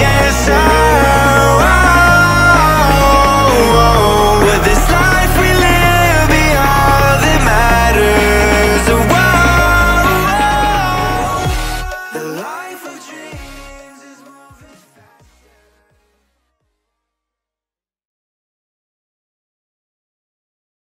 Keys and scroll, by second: 2.9 space, 8.3 space.